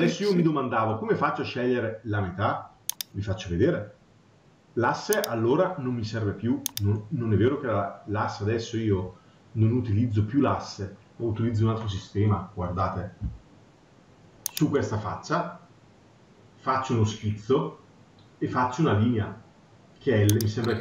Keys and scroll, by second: 8.7 Delete.